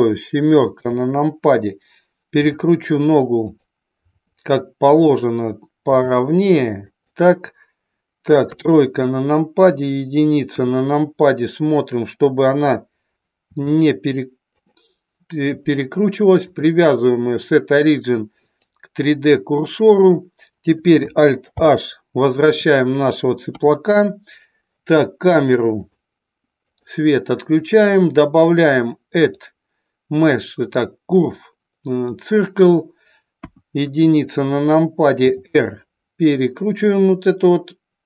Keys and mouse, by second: 0.7 KP_7, 2.3 r, 3.4 click, 5.8 g, 6.8 click, 8.4 KP_3, 10.4 KP_1, 13.4 r, 14.6 click, 16.4-18.7 drag, 21.5 alt+h, 23.5 KP_3, 25.8 click, 26.7 click, 29.2-32.2 drag, 33.5 KP_1, 35.2 r.